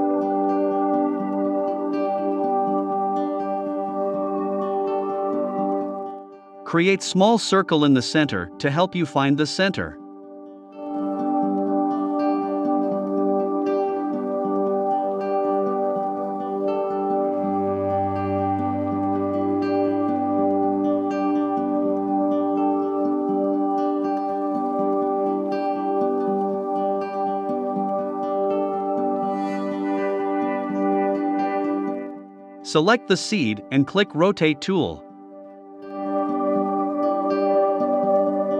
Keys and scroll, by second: 5.2 super+c, 5.5 super+f, 13.6 i, 15.0 v.